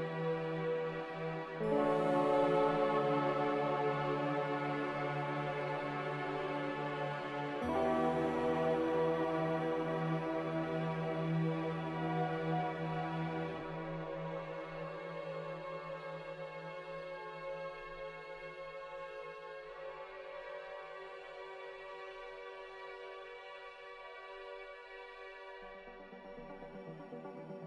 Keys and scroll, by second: 23.1 Escape, 24.5-25.0 typing.